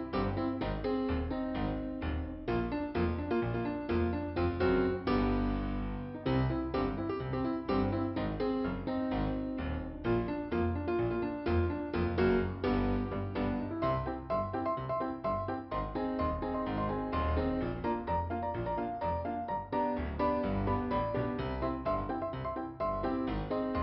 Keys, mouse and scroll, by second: 1.7 click, 2.6 click, 3.3 click, 6.1 click, 6.2 click, 6.5 click, 6.6 double click, 6.9 double click, 7.5 double click, 10.1 scroll down 1, 11.3 click, 18.7 click, 19.4 scroll up 2, 21.1 right click, 21.7 right click, 22.8 right click.